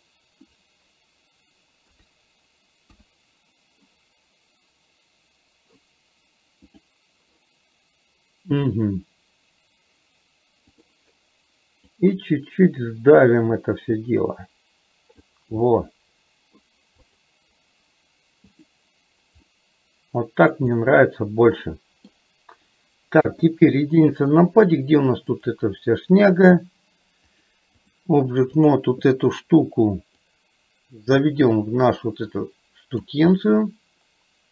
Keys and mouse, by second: 1.9 KP_3, 10.8 click, 12.3-15.3 drag, 15.8 middle click, 19.5-20.7 middle drag, 20.8-22.2 middle drag, 23.3 KP_1, 25.4 click, 27.4 click, 30.3-33.2 drag, 33.4-34.5 middle drag.